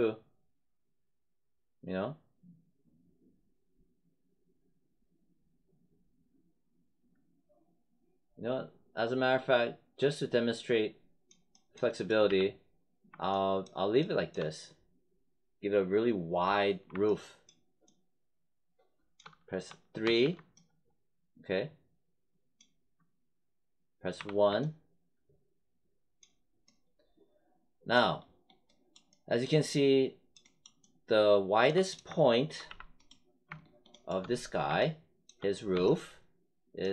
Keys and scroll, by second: 12.2 w, 20.0 3, 24.1 1, 32.6 w.